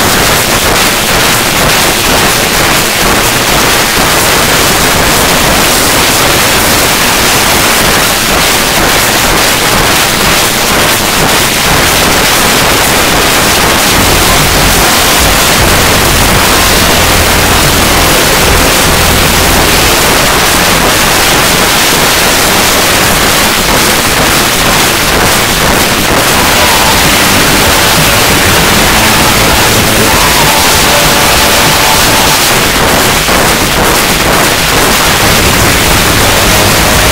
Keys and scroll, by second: 20.0 Page_Down, 32.3 Page_Down.